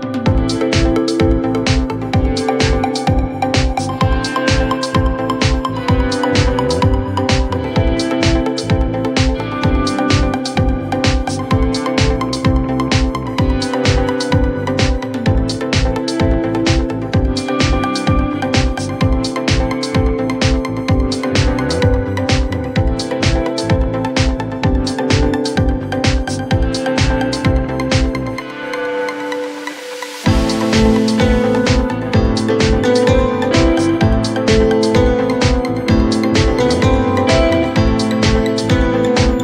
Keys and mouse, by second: 0.7 alt+middle click, 1.3 alt+middle click, 1.7 4, 2.2 click, 4.7-5.4 alt+drag, 5.8 alt+middle click, 6.9 alt+click, 7.4 click, 10.3 2, 11.1 click, 11.4 w, 12.1-13.5 drag, 13.7 alt+click, 14.8 alt+middle click, 15.1 alt+click, 15.8 4, 16.4-17.0 alt+drag, 17.3 alt+click, 19.8 alt+click, 20.9 alt+click, 21.5-21.9 alt+drag, 22.0 click, 22.7 alt+click, 23.2 alt+click, 26.8 click, 28.9 click, 29.8 2, 30.6 click, 32.0 click, 32.5-35.0 drag, 36.2 click, 37.7 alt+x, 39.1 4.